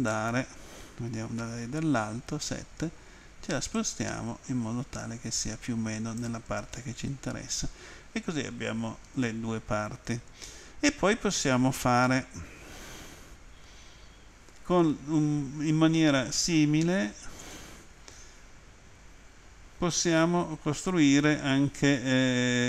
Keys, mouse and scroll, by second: 0.0 click, 1.4 Home, 3.8 click, 6.7 middle click.